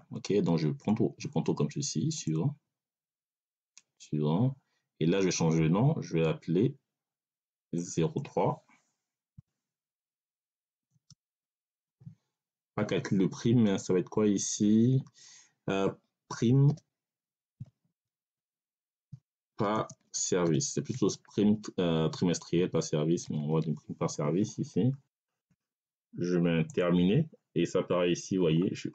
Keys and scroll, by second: 9.2 0, 9.8 3, 10.8 space, 11.1 6, 16.2-20.8 typing, 22.4 i, 23.1 c, 23.3 e, 23.5 s.